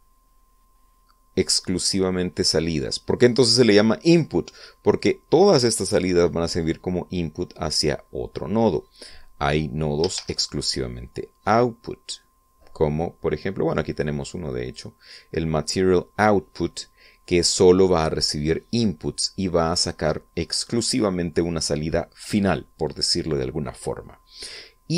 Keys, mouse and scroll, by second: 10.9 shift+a, 14.6-15.7 drag.